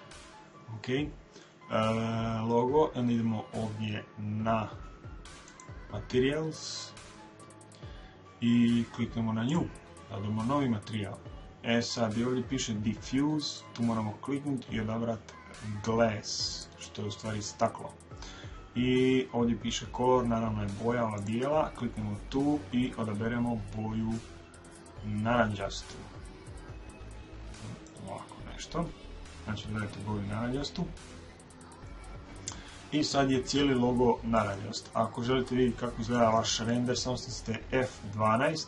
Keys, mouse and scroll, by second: 5.4 click, 13.4 click, 21.1 click.